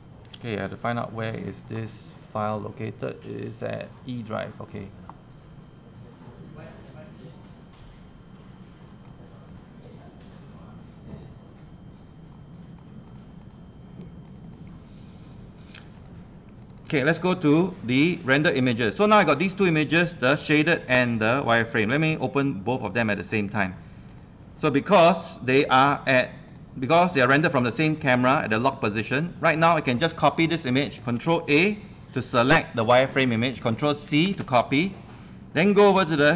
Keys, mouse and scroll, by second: 1.3 click, 2.1 click, 12.4 scroll down 1, 13.1 click, 25.8 click, 26.2 click, 31.2 ctrl+a, 32.1 ctrl+a, 34.1 ctrl+c, 34.2 ctrl+c, 34.3 ctrl+c, 34.3 ctrl+c, 34.4 ctrl+c, 35.8 click, 36.0 ctrl+a.